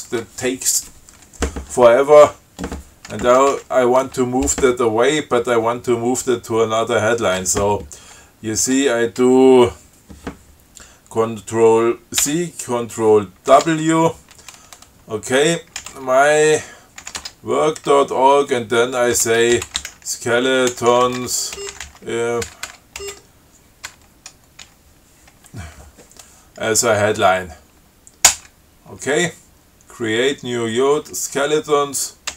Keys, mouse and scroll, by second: 3.5 Up, 12.5 ctrl+c, 13.7 ctrl+w, 15.8-17.2 typing, 17.4 Tab, 19.3-24.9 typing, 28.5 Return.